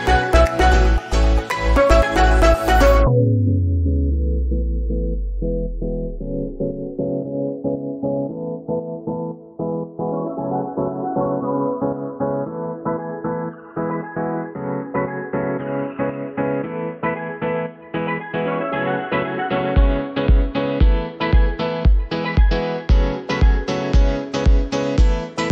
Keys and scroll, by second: 0.8 Delete, 2.8 Delete, 7.8 Delete, 9.1 F3, 11.3 shift+F2, 11.8 Escape, 20.5 g.